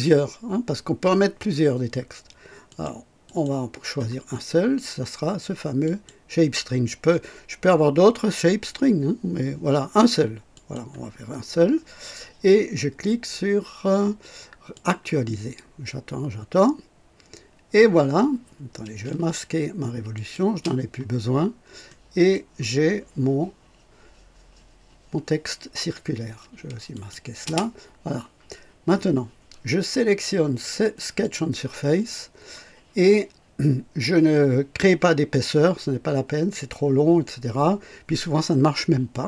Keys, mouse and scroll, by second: 2.6 click, 3.2 click, 5.8 click, 10.5 click, 14.7 click, 20.1 click, 20.5 space, 21.3 scroll up 1, 21.8-22.5 right drag, 26.9 click, 27.4 space, 31.2 click.